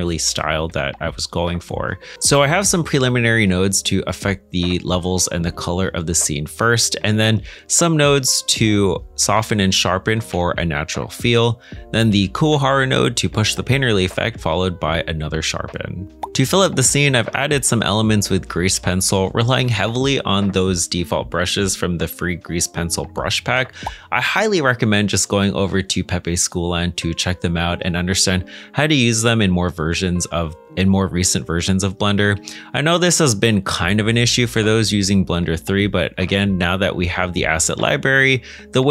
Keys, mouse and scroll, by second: 6.6 middle click, 10.4 g, 13.7 middle click, 16.1-16.5 scroll up 1, 16.5 g, 19.6 Escape, 21.4 middle click, 32.4 middle click, 33.4 middle click, 34.5 middle click.